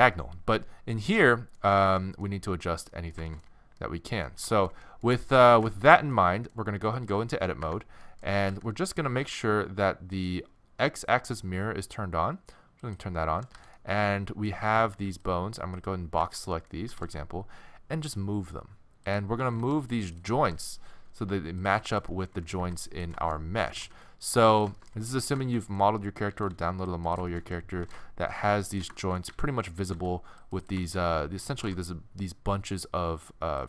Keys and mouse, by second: 1.3 middle click, 3.1 middle click, 3.2-5.9 middle drag, 7.7 Tab, 8.5 a, 9.3 t, 13.6 a, 14.7 a, 15.0 b, 16.3 click, 16.9 g, 19.4 a, 19.6 c, 20.4 g, 21.6 click, 22.4 a, 22.6 b, 23.7 g, 24.6 click, 25.7 middle click, 26.3 a, 26.5 click, 26.5 c, 27.8 g, 29.3 a, 29.5 a, 29.9 a, 30.0 c, 31.6 g.